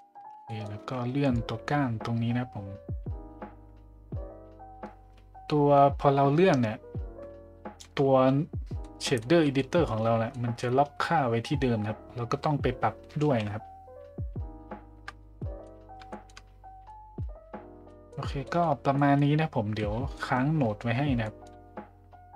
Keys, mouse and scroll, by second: 0.5 middle click, 1.4-7.8 shift+drag, 8.8-9.2 middle drag, 9.5-9.9 shift+middle drag, 10.3 middle drag, 13.3 ctrl+z, 15.4 middle drag, 16.1 shift+middle drag, 16.9-17.2 middle drag, 17.9 middle drag, 18.4 shift+middle drag, 18.9 middle drag, 20.2 middle click, 21.3 middle drag.